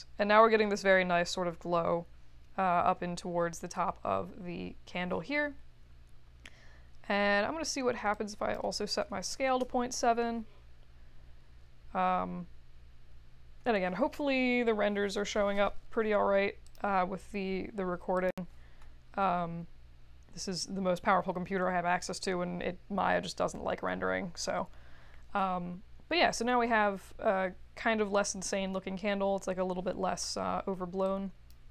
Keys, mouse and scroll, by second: 31.0 click.